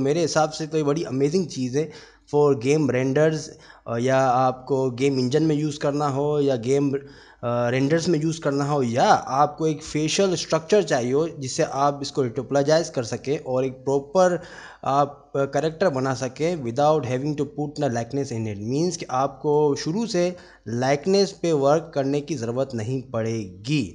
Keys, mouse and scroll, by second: 0.7 middle click, 8.1-8.7 middle drag, 9.8 click, 11.0-11.5 middle drag, 18.8-19.3 middle drag, 22.3-23.5 middle drag.